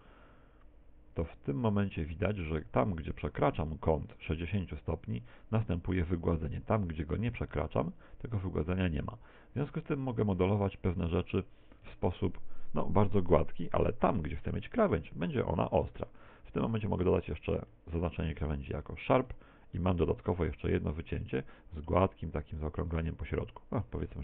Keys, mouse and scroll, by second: 11.3 click, 11.5-12.2 scroll up 3, 11.9 Tab, 12.2 middle click, 13.1 middle click, 14.6 middle click, 15.5 Tab, 16.1 a, 16.7 alt+shift+right click, 18.1 ctrl+e, 19.3 Tab, 19.8 middle click, 21.7 middle click, 23.5-23.9 scroll down 5, 24.1 middle click.